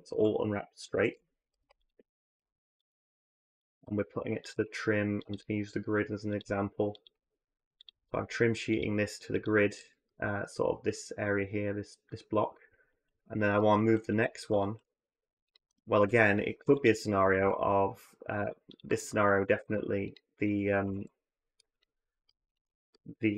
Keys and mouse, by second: 0.0-0.9 typing, 2.2-5.1 typing, 6.2 s, 6.9 g, 7.7 s, 12.7 click, 13.3 click, 13.8 middle click, 15.8 click, 16.4 u, 17.2 a, 18.2 g, 20.6 a, 20.7 a.